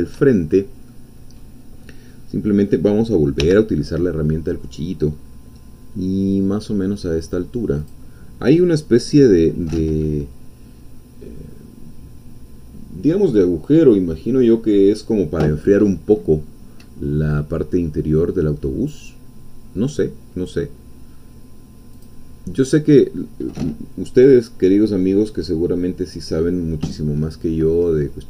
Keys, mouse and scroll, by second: 3.4 k, 7.8 click, 21.9 click.